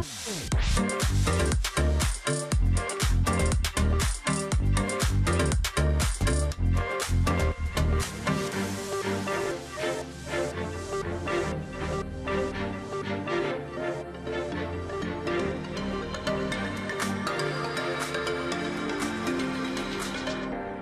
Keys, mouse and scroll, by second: 0.2 ctrl+click, 0.2 space, 0.8 shift+x, 2.4 double click, 2.6 ctrl+z, 4.0 ctrl+click, 4.2-4.5 alt+scroll down 1, 4.5-5.1 alt+scroll up 1, 10.9 ctrl+click, 12.5 ctrl+z, 13.6 shift+x, 14.0 ctrl+click, 14.2-14.5 alt+scroll down 1, 14.5-15.3 alt+scroll up 1, 15.5-16.2 alt+scroll down 1, 16.7-17.3 alt+scroll up 1, 17.3 ctrl+click, 18.6 space, 19.9 ctrl+click, 20.1 alt+scroll down 1, 20.2-20.7 scroll up 1, 20.7-20.8 alt+scroll down 1.